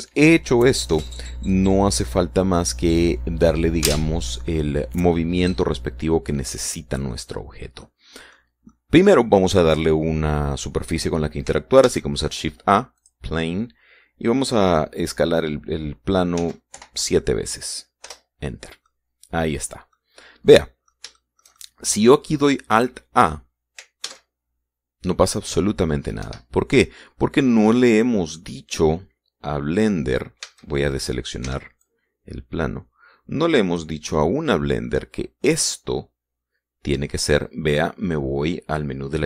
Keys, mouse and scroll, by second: 7.3-7.8 scroll down 1, 7.8 middle click, 8.6-9.0 scroll down 1, 9.0 middle click, 9.8 middle click, 9.8 scroll up 2, 12.5 shift+a, 13.6 click, 15.4 click, 16.2-18.0 middle drag, 17.0 s, 17.4 7, 18.7 Return, 19.3 scroll down 2, 19.5-20.8 middle drag, 20.8 scroll up 1, 21.1 middle click, 21.8 shift+middle click, 24.7 alt+a, 26.9 Escape, 27.5-29.2 drag, 31.1 a, 32.1 b, 32.5-34.6 drag, 34.9 middle click, 35.4 click.